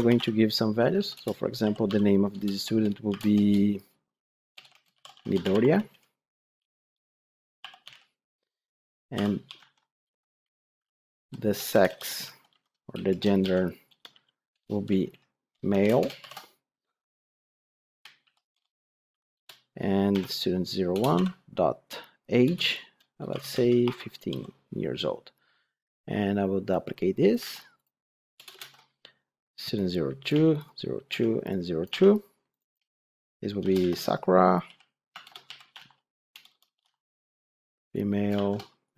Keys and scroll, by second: 1.1 Return, 9.5 ctrl+d, 10.7 ctrl+shift+Left, 12.8 ctrl+shift+Right, 14.5 Return, 20.8 Return, 27.3 ctrl+c.